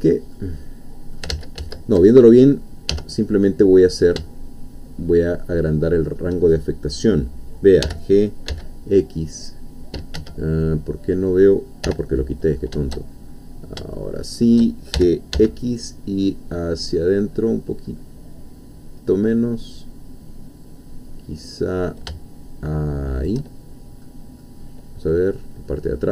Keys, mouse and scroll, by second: 0.3 middle click, 1.3 ctrl+z, 2.1 ctrl+middle click, 2.9 ctrl+1, 3.3-6.3 middle drag, 7.8 g, 8.5 x, 10.2 Escape, 10.5-10.8 scroll down 1, 11.9 o, 12.2 middle click, 13.1-13.8 shift+scroll up 1, 13.9-14.9 shift+middle drag, 14.9 shift+g, 15.4 shift+x, 16.8-17.7 scroll up 1, 17.9-18.3 scroll up 1, 23.2 shift+click, 23.6-24.9 shift+middle drag, 25.1-26.1 middle drag.